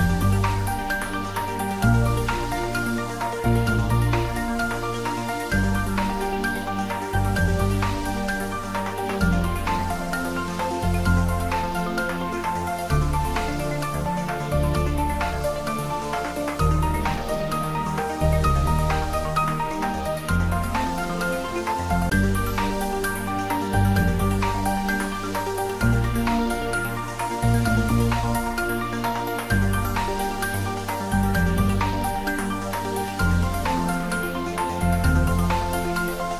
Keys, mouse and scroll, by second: 4.3 click, 7.9 click, 11.8 click, 11.9 click, 15.3 click, 18.1-19.2 scroll down 1, 20.5-25.1 drag, 25.1-25.6 scroll down 1, 29.0 click, 29.8-32.5 drag, 32.5 scroll down 1, 35.6-36.3 drag.